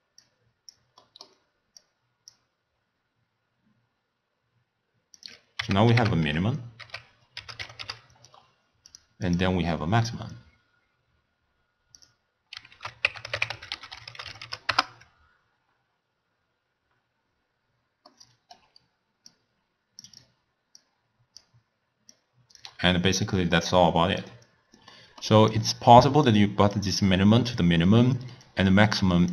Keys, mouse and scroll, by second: 1.1-1.8 middle drag, 1.8-4.8 drag, 5.2-8.3 drag, 11.4-14.4 drag, 18.2-19.4 middle drag, 19.4 drag, 20.9 drag, 22.2 click, 23.3 click, 25.0 middle click, 25.6-28.6 drag.